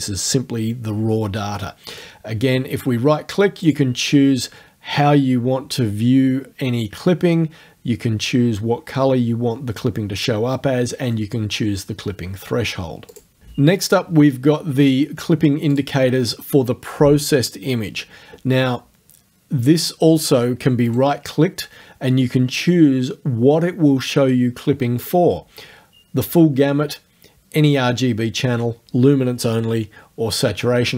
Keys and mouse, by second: 2.0 right click, 3.7 click, 13.1 click, 15.8 click, 20.9 right click, 25.0 click.